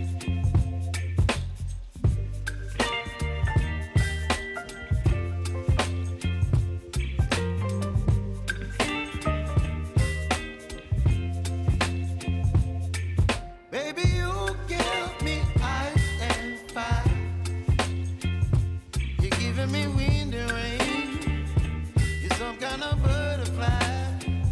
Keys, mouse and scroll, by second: 1.1 typing, 2.0 click, 3.4 [, 4.1 click, 5.1 [, 5.6 click, 6.7 [, 9.3 click, 9.7 space, 11.9-13.2 typing, 14.1 click, 14.7 ctrl+a, 15.8 click, 16.5-17.2 typing, 18.7 ctrl+a, 19.7 ctrl+shift+c, 20.6-22.1 typing, 22.5 Return.